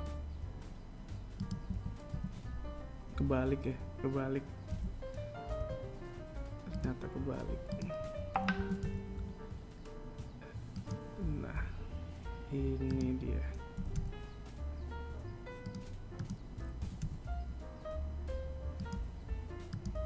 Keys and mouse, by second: 1.9 right click, 2.2 KP_1, 2.8 KP_3, 5.2 g, 8.2 right click, 9.0 g, 13.4 right click, 14.2 g, 16.6 right click, 17.3 g.